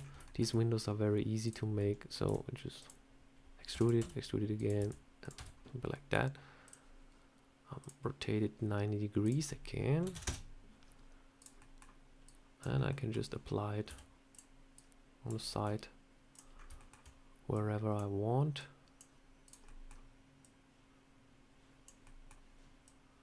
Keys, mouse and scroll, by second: 0.1 shift+middle click, 1.3 click, 1.6 middle click, 2.1 e, 3.6 e, 3.8 s, 4.6 e, 5.2 Tab, 5.8 middle click, 6.5 click, 7.7 click, 9.1 click, 11.2 click, 11.5 middle click, 12.1 click, 12.6 scroll down 2, 12.7 scroll up 1, 12.8 middle click, 13.7 s, 14.6 click, 15.4 middle click, 16.2 click, 16.4 scroll up 3, 16.6 shift+middle click, 17.4 click, 18.4 click, 19.3 click, 19.5 middle click, 20.3 click, 21.9 middle click, 22.7 click.